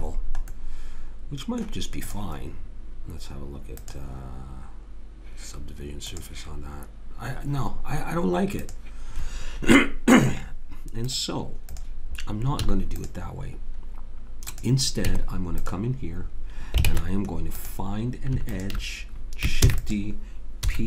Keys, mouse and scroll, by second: 0.5-2.1 middle drag, 2.1 click, 2.1 right click, 3.0 click, 10.3-12.6 drag, 12.6 x, 15.0 Tab, 15.9 click, 16.3 middle click, 16.9 ctrl+Tab, 18.5 click, 19.7 shift+d, 20.6 p.